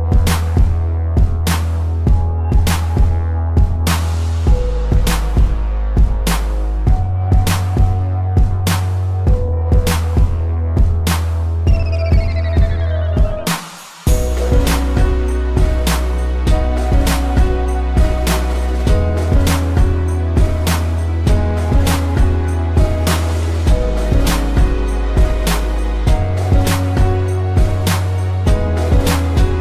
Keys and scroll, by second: 0.3 space, 1.2 ctrl+z, 1.7 ctrl+-, 6.1 ctrl+=, 10.9 space, 21.0 space, 25.0 space.